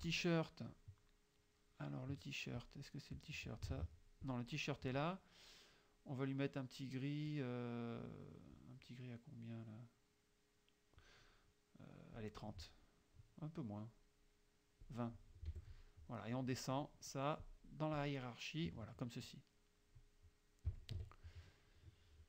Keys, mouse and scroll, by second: 0.7-1.8 scroll up 1, 2.6-3.8 drag, 3.8 ctrl+z, 4.3 ctrl+click, 12.3 click, 14.9 click, 15.6 F1, 15.7 middle click, 17.4 click, 18.0 click, 19.0 click, 19.6 click, 21.0 KP_Subtract, 21.8 click.